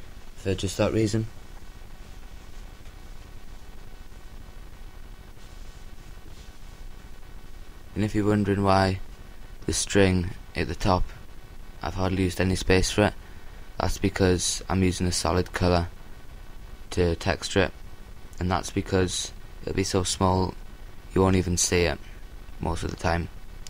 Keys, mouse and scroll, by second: 0.5-2.0 drag, 0.5 a, 2.0 l, 4.4 r, 6.5-7.7 drag, 6.5 s, 12.8-14.0 drag, 12.8 g, 14.9-17.0 drag, 16.1 a, 17.0 l, 18.2 s, 22.8 click, 22.8 g.